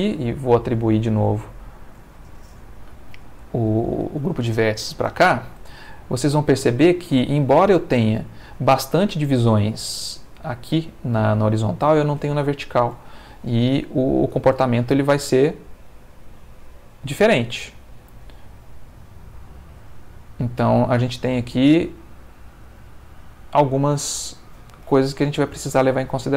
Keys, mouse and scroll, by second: 0.3 click, 1.4 shift+click, 3.2 click, 4.2 a, 5.0 click, 6.2 click, 7.0 shift+click, 8.1 click, 12.9 Tab, 14.3 space, 21.5-24.1 middle drag, 24.3 Escape, 25.0 middle click, 25.7 Tab.